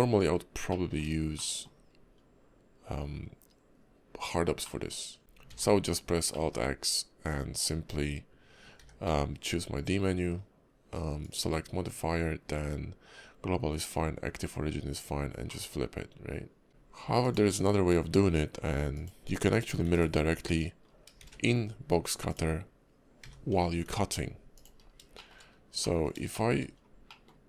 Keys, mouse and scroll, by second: 0.1-0.7 scroll down 1, 0.7 middle click, 1.0 scroll down 1, 1.3 shift+middle click, 1.9 scroll up 2, 4.6 middle click, 5.2 ctrl+z, 5.4 alt+x, 6.3 middle click, 14.9 click, 15.5 middle click, 17.0 x, 18.9 click, 19.8 x, 20.8 scroll down 3, 21.2 shift+a, 23.2 g, 24.8 scroll down 2, 25.1 shift+middle click, 25.4 scroll up 4, 25.8 middle click, 26.3 shift+middle click, 26.6 scroll up 2, 27.1 middle click.